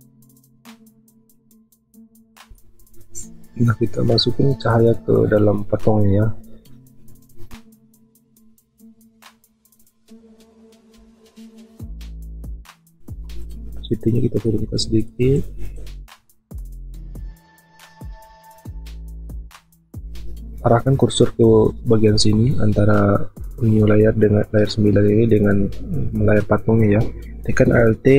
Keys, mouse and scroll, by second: 11.0 b, 18.9 typing, 20.6 typing.